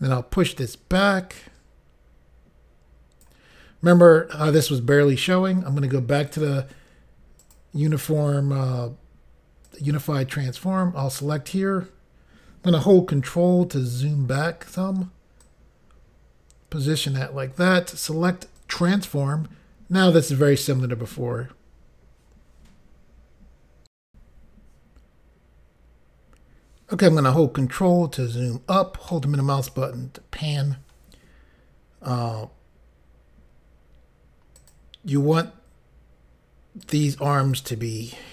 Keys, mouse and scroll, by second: 6.4 click, 7.5 click, 9.7 click, 14.0 scroll down 1, 15.5 click, 18.6 click, 24.0 Insert, 27.5 ctrl+scroll up 1, 29.0 middle click, 34.5 click, 36.8 click, 37.4 click.